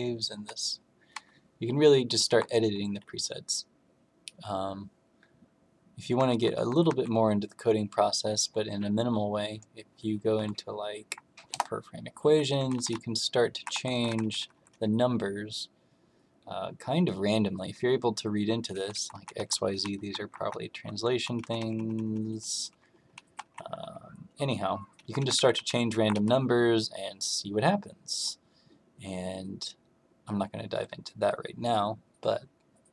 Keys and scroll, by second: 0.3 Right, 1.1 Left, 2.2 Up, 6.1 Down, 6.4 Down, 6.6 Down, 6.8 Down, 10.3 Down, 11.4 Return, 12.5 Down, 12.7 Down, 12.9 Right, 13.6 Down, 13.9 Down, 14.0 Right, 14.2 Right, 14.3 Right, 14.5 Right, 14.6 Right, 17.7 Left, 18.7 Left, 18.8 Left, 19.1 Left, 19.3 Down, 19.5 Down, 19.6 Down, 19.9 Up, 20.1 Up, 20.3 Up, 20.7 Down, 20.9 Down, 21.0 Down, 21.3 Right, 21.5 Right, 21.7 Right, 21.9 Right, 22.1 Right, 22.2 Right, 22.4 Right, 22.6 Right, 22.8 Right, 23.1 Down, 23.4 Down, 23.5 Down, 23.7 Down, 25.0 Up, 25.1 Up, 25.3 Up, 25.5 Right, 25.7 Right, 25.8 Up, 26.1 Right.